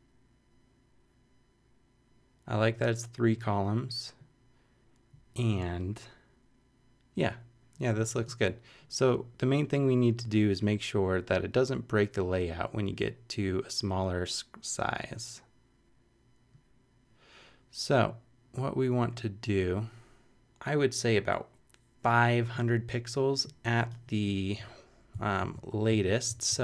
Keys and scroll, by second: 25.4 shift+super+c, 25.7 super+Down.